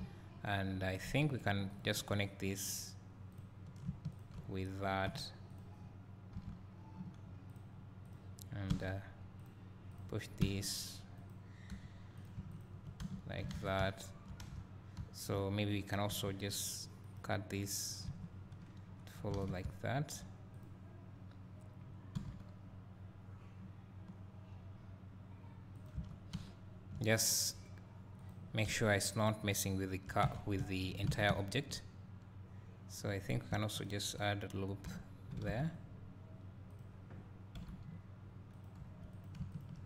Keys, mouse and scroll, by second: 0.0 click, 1.8 ctrl+click, 3.4 click, 4.2 shift+click, 5.1 j, 5.6 click, 6.4 g, 7.7 click, 9.5 click, 10.5 g, 11.3 click, 11.7 3, 12.2 click, 12.6 shift+click, 13.0 f, 13.5 alt+a, 14.5 1, 16.1 k, 18.1 k, 18.2 space, 19.4 alt+a, 19.6 `, 20.6-22.2 drag, 22.2 g, 25.8 right click, 25.8 click, 26.0 Tab, 28.2 drag, 28.7 `, 30.3 Tab, 31.1 alt+a, 33.3 click, 33.8 shift+click, 34.9 j, 35.5 alt+a, 35.9-36.8 scroll up 2, 36.8 click, 37.6 g, 38.6 click, 38.9 3, 39.2 click.